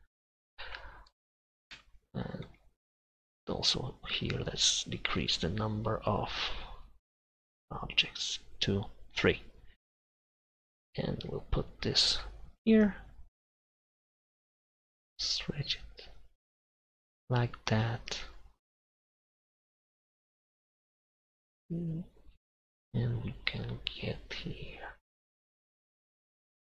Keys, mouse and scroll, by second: 1.8 Tab, 3.0 Tab, 4.4-5.5 drag, 16.2-21.5 right drag, 21.5-22.7 drag, 22.7 KP_1, 25.7 g.